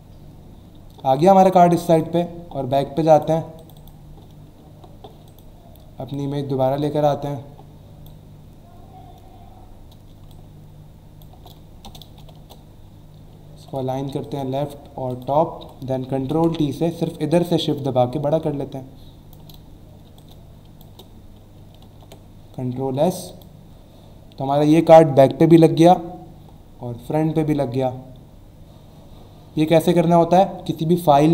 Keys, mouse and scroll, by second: 1.9 click, 3.1 click, 3.6 click, 4.6 alt+scroll down 1, 5.2 click, 6.1 click, 10.3 alt+shift+click, 11.8 alt+Return, 13.5 ctrl+alt+a, 14.2 alt+click, 15.1 alt+click, 15.6 ctrl+alt+d, 17.1 alt+shift+click, 20.2 alt+click, 20.9 alt+Return, 21.8 ctrl+alt+s, 23.3 alt+click.